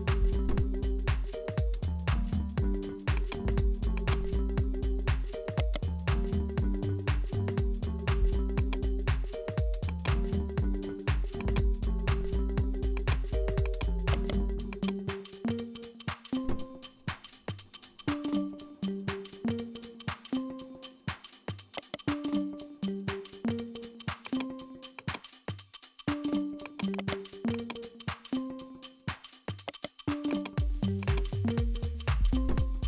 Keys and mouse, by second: 0.6 ctrl+b, 4.0-5.5 drag, 5.5 right click, 6.6 click, 7.6 Tab, 8.5 click, 9.5 w, 11.4 click, 12.1-13.7 drag, 14.1 right click, 14.7 click, 19.7-21.5 drag, 21.5 right click, 22.1 s, 24.7 click, 25.5 s, 26.9 right click, 27.5 click, 28.5-29.6 drag, 29.6 right click, 30.2 x, 31.0 click.